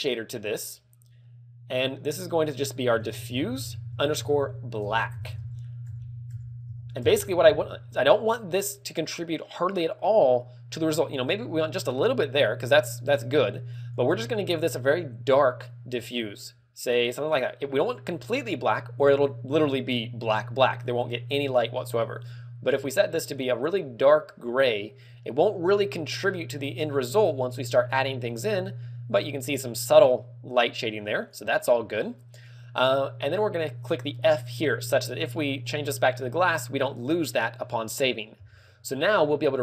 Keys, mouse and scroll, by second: 2.7 click, 14.0 click, 15.4 click, 34.8 click.